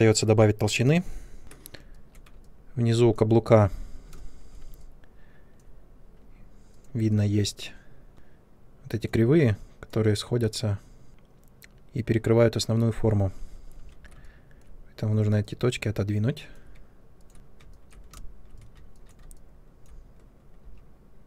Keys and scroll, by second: 1.4 ctrl+space, 4.1 ctrl+space, 13.7 1, 17.3 ctrl+space, 20.6 w.